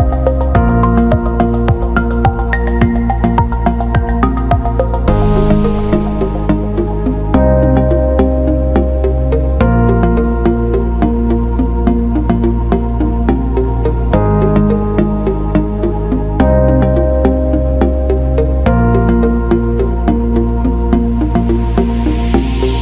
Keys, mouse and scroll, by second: 0.0 alt+middle drag, 0.6 alt+shift+middle drag, 0.9 alt+middle drag, 2.2-3.2 alt+middle drag, 3.3-3.6 alt+shift+middle drag, 4.3-4.6 alt+shift+middle drag, 5.1 Delete, 5.7 middle drag, 6.2 click, 7.1 alt+middle click, 8.2 click, 10.2 click, 10.9-11.8 right drag, 12.0 alt+middle drag, 12.7 drag, 14.8 click, 16.6 click, 17.5 click, 19.6-21.7 drag.